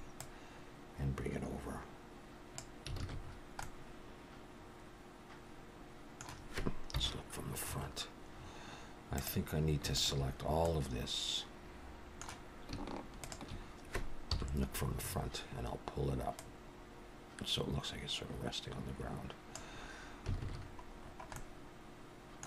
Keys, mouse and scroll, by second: 0.2 click, 3.0 alt+a, 3.2-3.7 scroll down 4, 3.6 middle click, 6.9 KP_1, 7.7-8.3 scroll up 1, 8.3 scroll down 1, 8.4-9.2 scroll down 3, 9.2 click, 9.9 shift+click, 10.6 middle click, 13.2 shift+click, 14.2 KP_1, 15.0-16.2 scroll up 5, 16.4 click, 20.4 alt+a, 20.6-21.3 scroll down 8, 21.3 middle click.